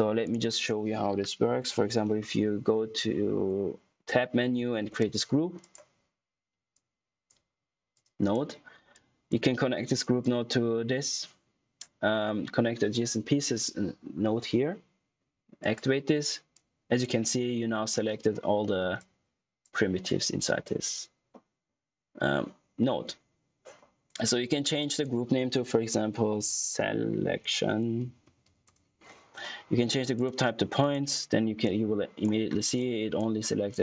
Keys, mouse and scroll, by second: 1.3-2.6 typing, 4.8 Return, 5.5 click, 15.5 click, 15.8 typing, 18.5 middle click, 18.9 click, 24.7 click, 26.1-28.9 typing, 30.1 click, 31.3 scroll up 1, 31.5 click, 32.4-32.7 scroll up 1, 32.7 click, 33.3-33.6 scroll down 1, 33.6 click.